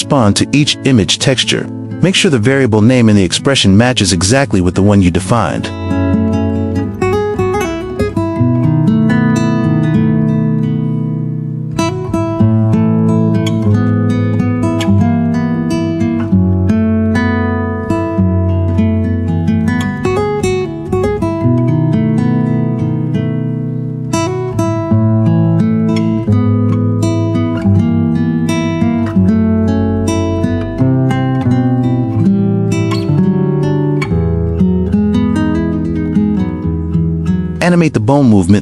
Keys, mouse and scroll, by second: 4.2-10.5 drag, 9.1 f, 9.5 BackSpace, 9.6 BackSpace, 11.7-14.6 drag, 17.1 click, 18.3 q, 19.3 click, 19.7 g, 20.7 click, 20.9 click, 20.9 g, 21.6 q, 22.2 g, 23.5 q, 24.2 g, 24.7 g, 24.9 middle click, 26.8 shift+middle click, 27.2 middle click, 27.2 g, 29.1 q, 29.9-32.9 drag, 31.4 BackSpace, 33.8 q, 34.7 g, 35.4 middle click, 38.5 g, 38.5 middle click.